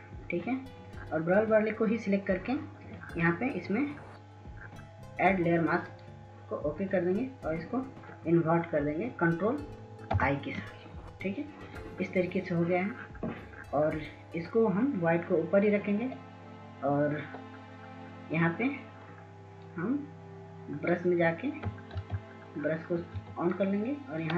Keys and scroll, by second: 10.6 ctrl+i, 22.6 ctrl+s, 22.8 ctrl+s, 22.9 ctrl+s, 23.5 ctrl+s, 23.7 ctrl+s, 23.7 ctrl+s.